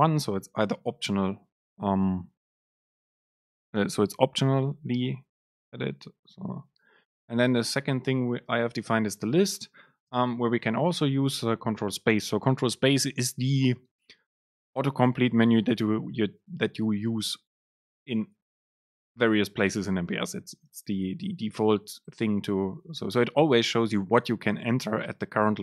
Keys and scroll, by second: 10.2 super+space.